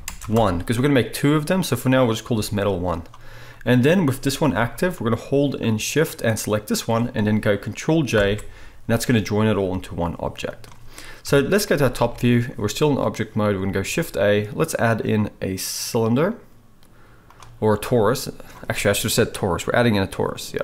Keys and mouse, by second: 2.5 g, 4.4 g, 6.2 shift+middle click, 8.2 ctrl+j, 10.1 g, 11.2 KP_7, 12.0 alt+a, 13.7-20.6 shift+middle drag, 13.9 shift+a.